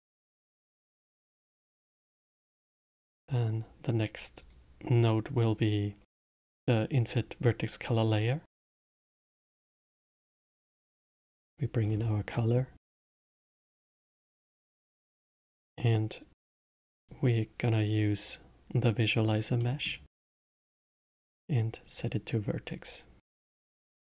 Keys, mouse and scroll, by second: 0.2 middle click, 0.8 click, 2.0-2.8 middle drag, 10.1 click, 11.8 scroll down 3, 12.3-14.8 middle drag, 14.8-15.2 scroll down 1, 15.2-17.0 middle drag, 17.0 click, 19.5 middle click, 20.3-21.1 scroll up 8, 21.1-23.2 drag, 23.2 middle click, 23.9 click.